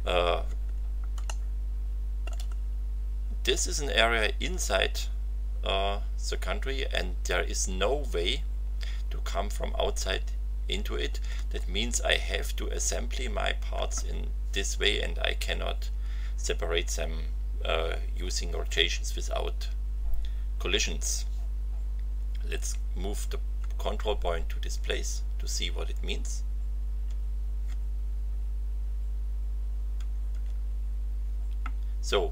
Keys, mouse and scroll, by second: 1.2-2.4 shift+middle drag, 2.5-2.8 shift+scroll up 3, 23.5 f, 29.9 t.